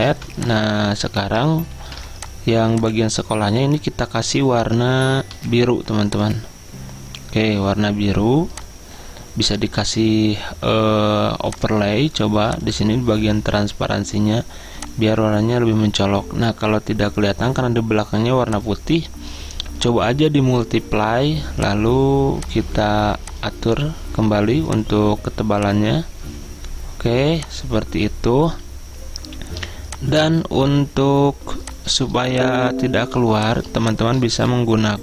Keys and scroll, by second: 0.2 v, 1.9 ctrl+alt+2, 5.4-6.7 typing, 8.3 i, 34.1-34.9 typing.